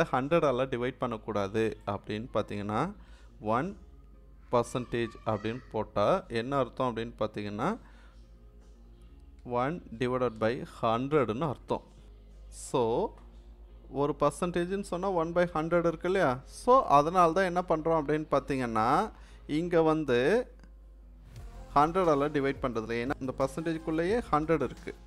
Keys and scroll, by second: 3.1 1, 4.5 shift+5, 9.4-11.2 typing.